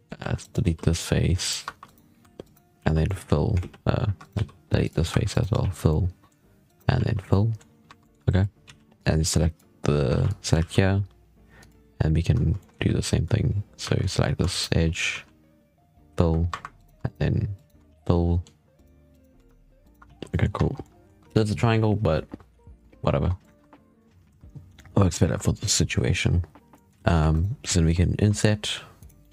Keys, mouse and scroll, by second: 0.0 3, 0.3 right click, 0.5 x, 1.5 1, 1.7 right click, 2.1 2, 2.3 right click, 2.6 f, 2.9-3.4 middle drag, 3.4 ctrl+z, 3.9 3, 4.1 right click, 4.2 x, 4.9 2, 5.2 right click, 5.5 f, 5.7 middle click, 6.5 right click, 6.8 f, 7.1 middle click, 7.7 1, 7.9 middle click, 8.5 z, 8.8 click, 9.7-10.0 scroll up 2, 10.0 alt+a, 10.1 click, 10.5 e, 12.5 middle drag, 12.6 z, 13.7 shift+2, 14.4 shift+right click, 15.0 f, 16.1 2, 16.7 right click, 16.9 shift+right click, 17.4 shift+right click, 17.8 f, 17.9 middle click, 18.6 right click, 19.0 right click, 19.3 shift+right drag, 19.7 shift+right click, 19.9 f, 20.2 middle drag, 20.4 Tab, 20.6 scroll down 1, 20.7-21.2 middle drag, 21.2 alt+a, 23.3 right click, 23.5 Tab, 23.6 z, 23.9 scroll up 5, 24.2 alt+a, 24.6-25.0 scroll up 5, 25.0-25.4 scroll down 3, 25.4 shift+middle click, 25.9-26.2 scroll down 5, 26.2-26.5 scroll up 4, 26.6 middle click, 26.9 z, 27.1 3, 27.2 right click, 27.6 middle click, 29.1-29.3 middle drag.